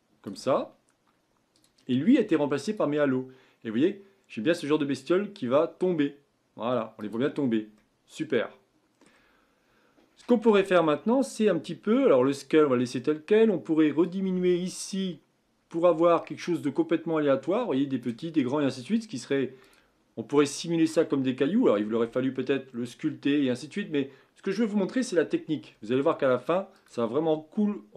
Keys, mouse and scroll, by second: 7.1-7.4 drag, 7.4-7.8 scroll down 1, 7.8-10.5 middle drag, 10.5-11.2 scroll up 2, 11.2-14.0 scroll down 1, 14.0-17.0 drag, 19.6-22.8 drag, 26.7 click.